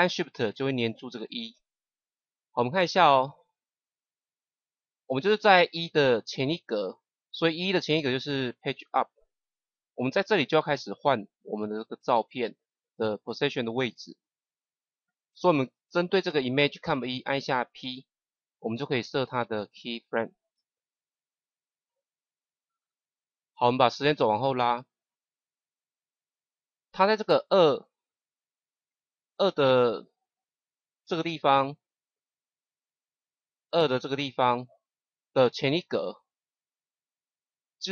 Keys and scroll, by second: 8.9 Page_Up, 17.7 p, 35.8 Page_Up.